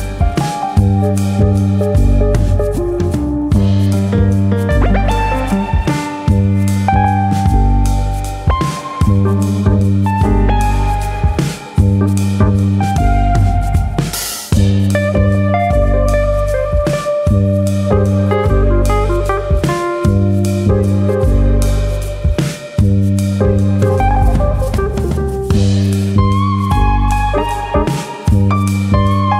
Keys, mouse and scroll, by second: 0.0 shift+click, 0.3 shift+click, 0.5 middle click, 0.9-1.6 ctrl+z, 1.9 ctrl+z, 2.1 ctrl+z, 2.2 ctrl+z, 2.5 ctrl+z, 2.8 ctrl+z, 3.2 middle click, 3.6 Tab, 4.0 middle click, 4.8 middle click, 5.8 click, 6.4 shift+click, 6.7 middle click, 7.2 click, 8.7 middle click, 9.4 middle click, 9.6 middle click, 10.3 click, 11.4 ctrl+z, 12.1 s, 14.7 click, 15.0 middle click, 15.5 middle click, 17.2 middle click, 18.0 click, 18.2 middle click, 18.9 middle click, 18.9 ctrl+click, 19.8 KP_3, 20.7 click, 21.6 click, 22.0 middle click, 22.5 ctrl+click, 23.2 ctrl+click, 23.2 KP_3, 24.2 click, 26.9 click.